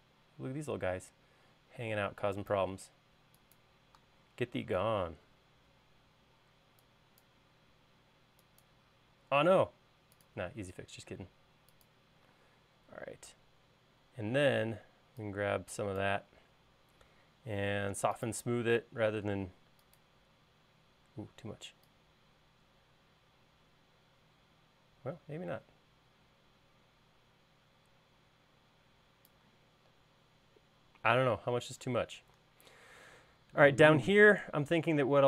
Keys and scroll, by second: 2.2 e, 9.9 l, 12.9 space.